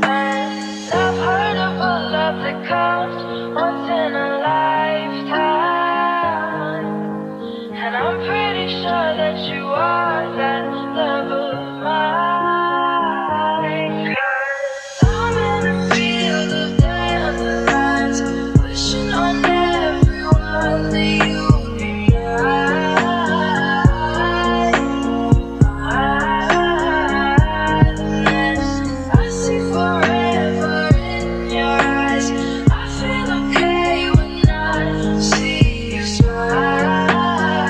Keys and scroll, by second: 3.3 ctrl+space, 4.4 f, 5.7 l, 10.0 Delete, 13.5 Delete, 14.5 ctrl+space, 15.8 4, 16.8 Return, 19.4 ctrl+space, 19.5-20.5 typing.